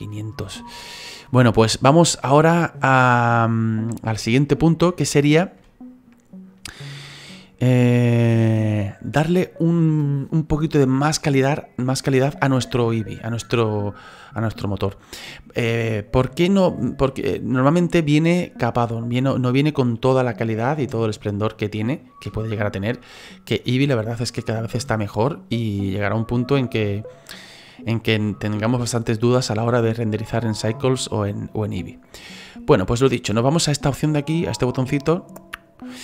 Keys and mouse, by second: 0.1 middle click, 0.8 shift+middle click, 4.6 middle click, 5.1 shift+middle click, 5.6 middle click, 22.4 shift+middle click, 23.6 middle click, 24.9 shift+middle click, 26.2 middle click, 26.9 middle click, 35.3 click.